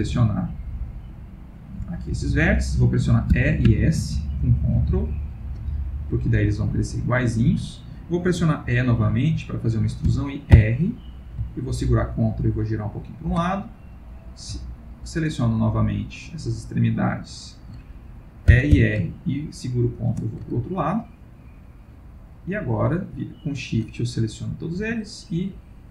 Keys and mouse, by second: 0.4 click, 1.6 shift+click, 3.3 e, 6.5 shift+middle click, 11.4 e, 13.9 click, 14.8 shift+click, 15.5 shift+click, 17.7 shift+click, 18.5 e, 20.8 shift+click, 21.6 shift+click, 23.1 shift+click, 23.8 shift+click, 24.8 s.